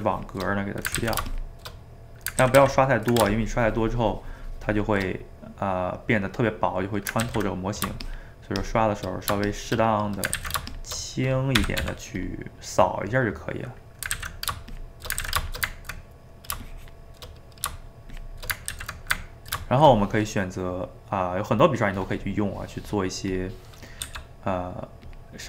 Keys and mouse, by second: 1.0 ctrl+z, 1.3-2.5 shift+drag, 2.5 ctrl+z, 2.6 ctrl+z, 3.3-5.1 shift+drag, 5.1-7.2 middle drag, 7.2 ctrl+z, 7.6 middle click, 8.0-9.1 shift+drag, 9.1 middle click, 9.5 shift+click, 9.9 middle click, 10.4 ctrl+z, 10.7 shift+click, 11.7 g, 11.8 f, 12.5 middle click, 13.1 click, 13.6 middle click, 14.2 ctrl+z, 14.8 shift+click, 15.2 ctrl+z, 15.5 shift+click, 15.8 ctrl+middle click, 16.6 shift+click, 17.4 middle click, 18.1 shift+click, 18.7 ctrl+z, 19.3-22.6 ctrl+middle drag, 23.3 click, 24.0 f.